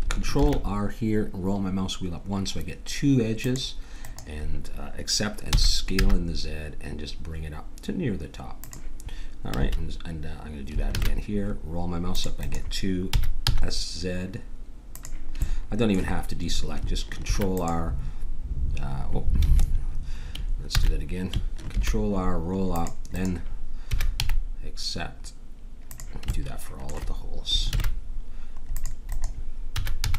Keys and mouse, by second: 0.4 ctrl+r, 5.6 s, 9.6 a, 10.9 ctrl+r, 13.1 s, 15.4-17.2 middle drag, 17.2 ctrl+r, 20.7 ctrl+z, 21.7 ctrl+r, 23.9 s, 26.3-27.7 middle drag, 27.7 ctrl+r, 29.7 s.